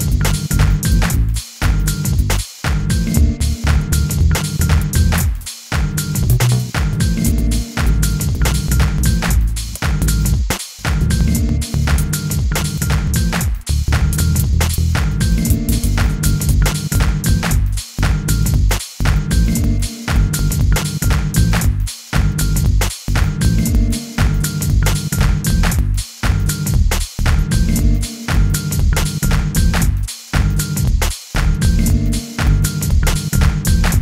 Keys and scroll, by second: 1.0 k, 1.6 u, 4.1 k, 6.8 u, 8.2 k, 9.2 u, 14.1 k, 15.8 u, 18.2 k, 18.5 u, 19.3 k, 19.5 u, 21.1-22.1 typing, 23.4 k, 25.1 g, 25.7 u, 26.7 t, 27.7 u, 28.7 t, 29.7 u, 30.8 t, 31.8 u, 32.8 t, 33.9 u.